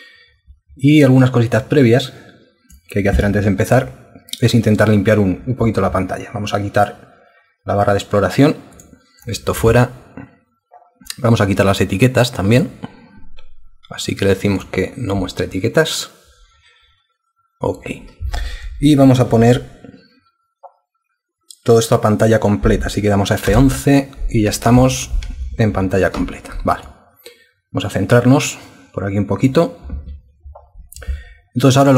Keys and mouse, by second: 23.5 F11.